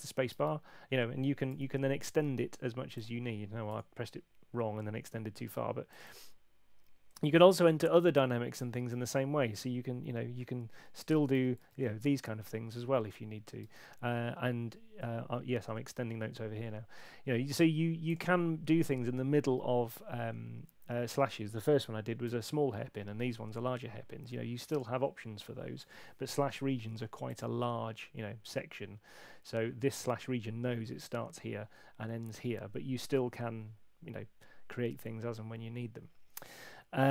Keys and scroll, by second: 1.5 Escape, 3.7 BackSpace, 7.4 Left, 8.9 shift+d, 11.1 shift+m, 11.7 shift+,, 13.7 space, 14.9 Escape, 22.3 BackSpace, 25.8 BackSpace.